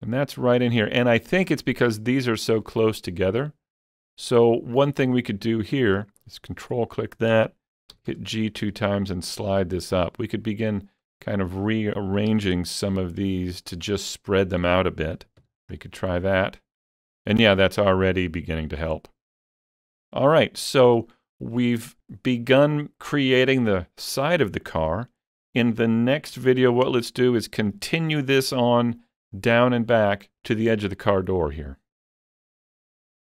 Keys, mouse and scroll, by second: 0.9 scroll up 2, 1.2 shift+middle click, 2.6-8.0 shift+middle drag, 4.8 click, 6.0 ctrl+click, 8.0 g, 8.1 g, 10.0 ctrl+click, 10.7 click, 11.6 ctrl+click, 12.3 g, 12.5 g, 13.5 ctrl+click, 15.2 alt+a, 15.4 Tab, 15.7 scroll down 3, 16.0-18.9 middle drag, 18.9-20.0 scroll up 3, 20.0 scroll down 4, 20.3 middle click, 21.1-25.1 shift+middle drag, 26.9 KP_3.